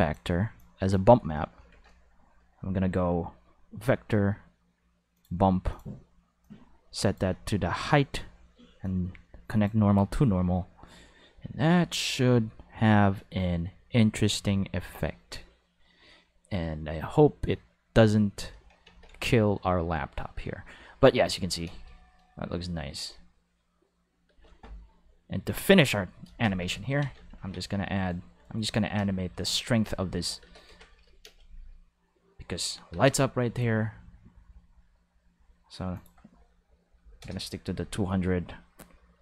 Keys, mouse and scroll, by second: 0.6 click, 1.7 shift+a, 1.8 5, 5.1 click, 5.7 click, 6.4-7.1 drag, 8.8-9.6 drag, 21.7 space, 21.8 5, 24.3 space, 24.4 5, 25.7 click, 27.0 ctrl+s, 27.1 ctrl+5, 27.4 alt+a, 27.9 right click, 27.9 5, 28.4 right click, 29.0 space, 29.1 5, 30.4 space, 30.5 5, 31.2 space, 31.3 5, 32.9 space, 33.0 5, 35.9 click, 36.8 5, 37.0 0, 37.1 5, 37.2 Return, 37.3 5.